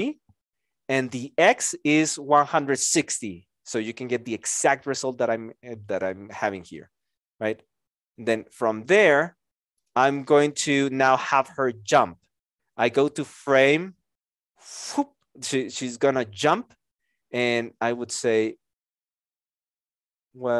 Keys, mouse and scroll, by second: 10.5 x, 10.7 Return.